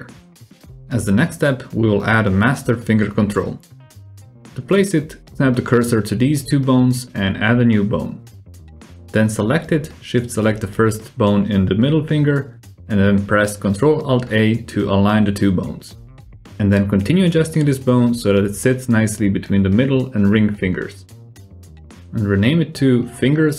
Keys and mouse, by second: 0.2 click, 1.2 q, 2.0 click, 4.3 shift+s, 6.2 shift+a, 6.8 g, 10.5 ctrl+alt+a, 11.5 click, 12.7 r, 14.1 click, 15.0 shift+click, 15.7-16.9 drag, 17.0 alt+z, 17.4 click, 18.1 shift+click, 18.6 g, 19.8 r, 21.0 click, 21.2 g, 21.6 F2.